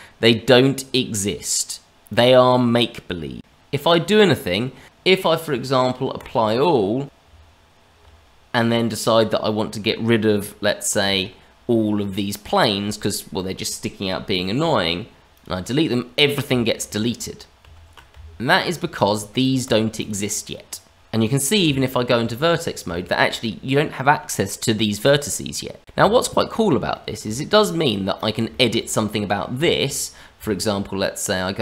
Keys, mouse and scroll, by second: 2.0 click, 3.4 click, 3.4-4.4 scroll up 2, 4.4 click, 6.1 click, 7.0 click, 7.2 Tab, 11.0 a, 14.5 Delete, 16.8 ctrl+z, 17.6 ctrl+z, 18.1 Tab, 18.9 click, 19.4 click, 19.6 click, 19.9 click, 21.6 Tab, 22.4-22.8 scroll up 2, 22.9 shift+middle click, 23.4 middle click, 25.9 Tab, 26.8 middle click, 27.3 shift+middle click, 27.7 click, 28.1 click, 28.6 shift+middle click, 28.8-29.1 scroll up 2, 29.1 middle click, 29.6 middle click, 30.3 Tab.